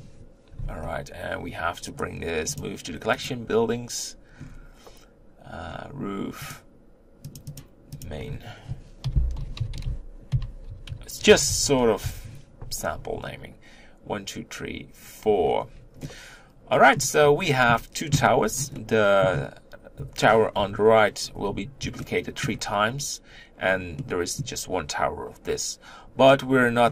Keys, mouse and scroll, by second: 3.1-6.4 right drag, 6.4 click, 7.3-12.0 drag, 15.3-15.9 scroll down 2, 15.9-17.1 middle drag, 17.1-18.2 scroll up 3, 18.2-18.6 scroll down 2, 18.6 middle click, 19.2-20.4 scroll up 1, 20.4 KP_1, 21.9-26.3 shift+middle drag, 26.3-26.9 scroll up 3.